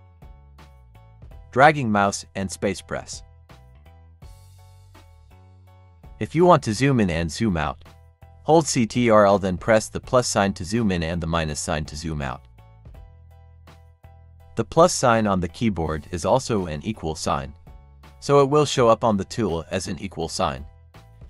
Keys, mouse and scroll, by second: 0.6 click, 0.9 space, 2.3 click, 2.9 space, 3.4 click, 3.6 space, 4.8 click, 4.9 space, 12.2 ctrl+-, 14.0 ctrl+=, 19.9 ctrl+=, 20.6 ctrl+=.